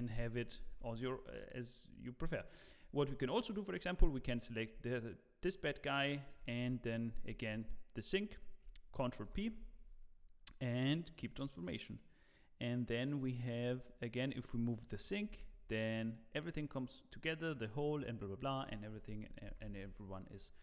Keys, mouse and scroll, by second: 0.0 middle click, 12.6 middle click.